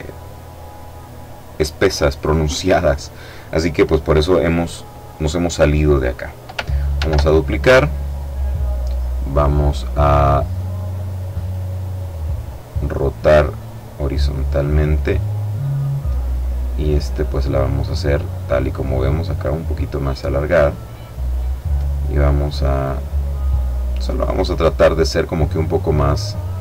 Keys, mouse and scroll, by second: 6.4 ctrl+d, 9.1 click, 10.8 click, 12.7-15.7 drag, 17.3-20.4 drag, 20.5 click, 21.7 click, 23.0 click, 25.7-26.6 drag.